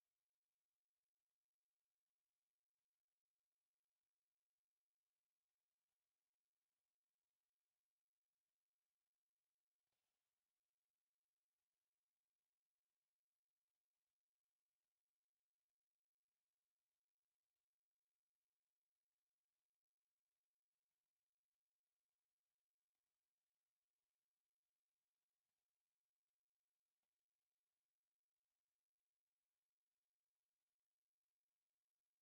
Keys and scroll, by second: 0.0-4.5 typing, 0.7 Escape, 1.7 Escape, 3.9 Return, 4.1 Escape, 5.5 Escape, 5.7 m, 6.0 space, 6.5 Escape, 6.7 t, 6.8 space, 7.3 Escape, 7.9-10.6 typing, 8.4 Escape, 9.0 Escape, 11.1 Escape, 12.0 m, 12.1 space, 13.0 Escape, 13.2 t, 13.3 space, 13.7 Escape, 14.2 t, 14.4 space, 14.9 Escape, 16.9 Escape, 22.5 s, 22.6 space, 23.4 4, 24.2 Escape, 28.6 Escape, 32.0 Escape.